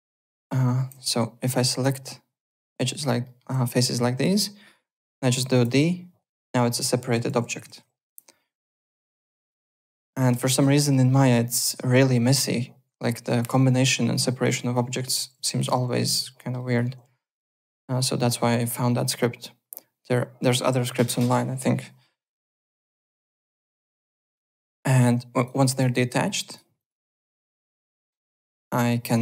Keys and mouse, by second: 0.3 alt+middle click, 0.5-1.4 typing, 1.4 click, 1.8 Tab, 2.0 click, 2.4 Tab, 2.6 alt+click, 2.8 alt+right click, 3.2 alt+middle click, 5.7 d, 7.0-7.9 typing, 8.0 F4, 8.8 click, 9.2 ctrl+z, 15.5 ctrl+z, 16.4 alt+middle click, 16.5 alt+right click, 16.8-18.2 typing, 18.5 click, 19.2 Tab, 19.4 click, 20.4 Tab, 22.7 alt+Tab, 24.0 click, 24.6 d, 25.0 `, 25.3 click, 26.5 click, 29.1 click.